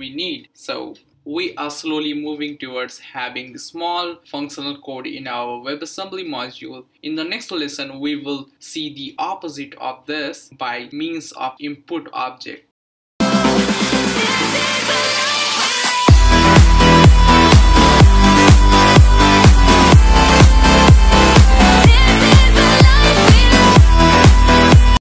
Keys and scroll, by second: 6.1 Return.